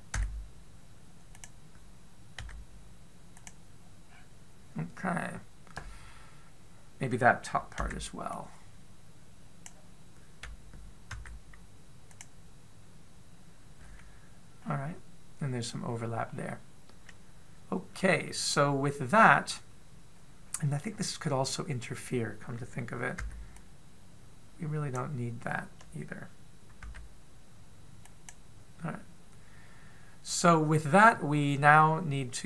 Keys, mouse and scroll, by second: 0.9 b, 3.2 x, 4.9-5.5 scroll up 3, 8.6 b, 11.9 x, 15.4-17.0 scroll up 2, 17.0 scroll down 1, 17.1-18.7 scroll down 1, 24.0 b, 27.6 x, 31.2-32.2 scroll up 1, 32.2 middle click.